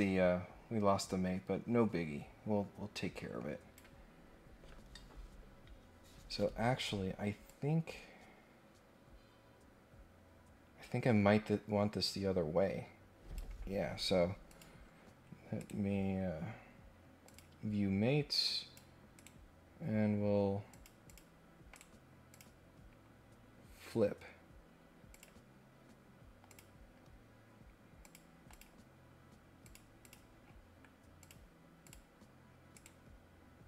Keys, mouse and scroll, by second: 4.2 scroll down 1, 7.4-13.3 drag, 14.5 click, 15.5 right click, 17.2 click, 18.4 click, 19.1 right click, 20.7 click, 21.1 click, 21.7 right click, 22.3 click, 25.1 click, 26.5 click, 28.0 click, 28.5 click, 29.6 click, 30.0 click, 30.4 scroll down 1, 31.2 click, 31.8 click, 32.7 right click.